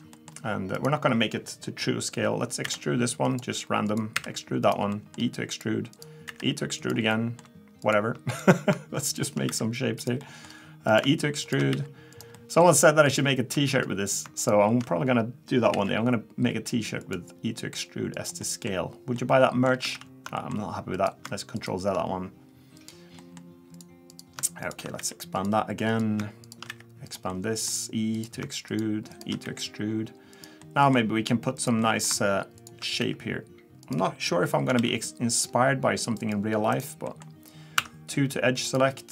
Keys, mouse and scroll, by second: 0.1 middle click, 0.1-0.7 scroll down 2, 0.7 click, 2.6 e, 3.8 click, 4.1 e, 4.9 middle click, 5.4 click, 5.9 click, 6.2 e, 7.1 middle click, 7.8 click, 8.3 click, 9.0 shift+click, 9.2 shift+click, 9.5 e, 10.2 middle click, 10.2 scroll up 1, 10.9 click, 11.4 click, 11.7 e, 12.4 middle click, 13.1 click, 13.7-14.2 scroll down 3, 14.4 click, 15.7 alt+e, 18.4 middle click, 19.2 middle click, 20.0 ctrl+z, 20.4 middle click, 20.9 click, 21.5 shift+click, 22.7 click, 23.2 middle click, 23.7 click, 24.1 click, 24.6 click, 24.7 shift+click, 25.0 e, 25.9 click, 26.4 shift+click, 26.7 e, 27.3 middle click, 28.1 click, 28.7 shift+click, 29.1 shift+click, 29.4 e, 30.6 middle click, 31.5 click, 31.8 middle click, 32.6 shift+click, 33.0 e, 34.8 ctrl+r, 37.1 middle click, 37.7 2, 38.6 click.